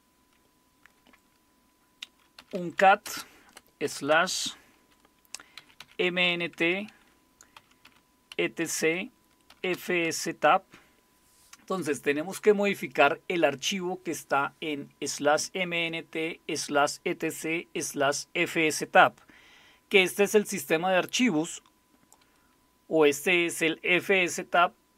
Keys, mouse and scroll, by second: 2.1-3.8 typing, 5.3-10.2 typing.